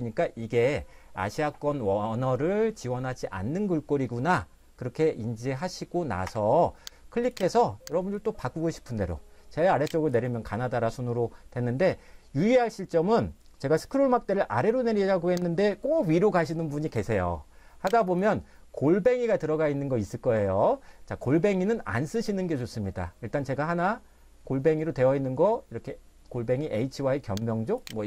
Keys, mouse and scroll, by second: 6.3 Escape, 7.3 click, 8.3 click, 15.8 click, 23.9-25.1 scroll up 1, 27.8 click.